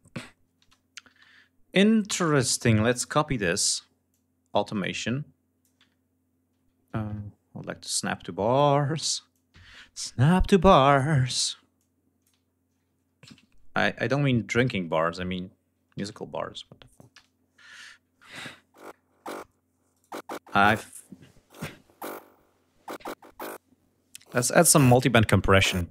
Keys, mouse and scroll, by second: 0.0 ctrl+space, 0.4 ctrl+g, 0.6 ctrl+scroll down 2, 1.3 scroll up 2, 2.1 scroll up 2, 2.6 r, 3.5-5.2 drag, 6.4 ctrl+scroll up 2, 7.2 click, 8.7-10.3 drag, 11.2 click, 11.9 ctrl+scroll down 2, 12.7 ctrl+c, 13.0 ctrl+scroll down 2, 13.4 ctrl+scroll up 2, 15.4 ctrl+v, 16.3 ctrl+click, 16.5 space, 16.7 ctrl+scroll down 2, 17.1 ctrl+scroll up 2, 18.2 click, 19.3 right click, 23.7 click.